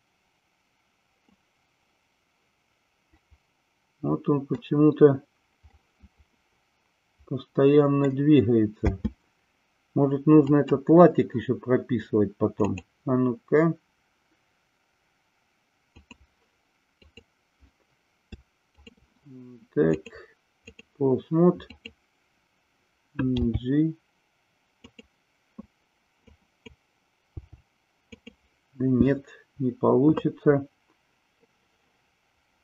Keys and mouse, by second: 1.2-4.5 middle drag, 5.7-8.0 middle drag, 8.8 space, 10.5 click, 12.5-16.2 drag, 17.0 click, 18.7 shift+click, 20.0-20.8 drag, 21.6 click, 23.4 g, 24.7 click, 26.2 click, 27.2 g, 28.1 click.